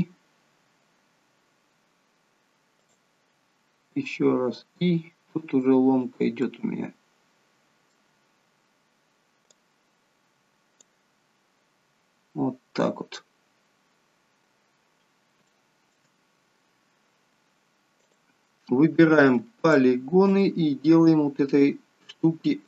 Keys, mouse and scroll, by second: 0.7 i, 3.3 i, 4.0 i, 6.3 middle click, 8.1 scroll down 3, 9.6 click, 11.1-12.4 scroll down 1, 12.4 scroll down 1, 14.4 scroll up 2, 15.5 shift+middle click, 16.1 scroll up 3, 18.0 click, 19.5 alt+shift+click, 22.5 s.